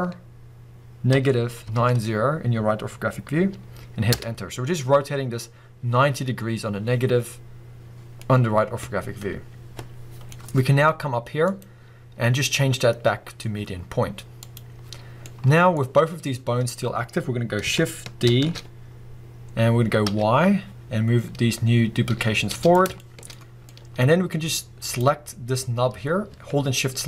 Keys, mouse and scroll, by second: 4.2 Return, 8.0 scroll down 2, 8.2-11.5 middle drag, 11.5-15.2 drag, 15.2-21.9 middle drag, 18.3 shift+d, 22.3 middle click, 22.7 click, 23.0-24.8 shift+middle drag, 24.8 click.